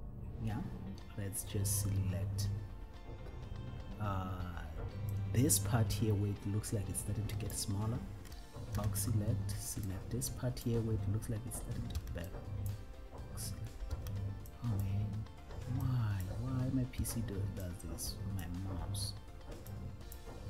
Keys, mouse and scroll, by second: 5.2-6.2 drag, 7.5 click, 9.0 b, 10.9 click, 12.2 b, 12.9 click, 14.2 b, 15.1 click, 16.2 click, 17.3 b, 18.7 click, 19.9 click.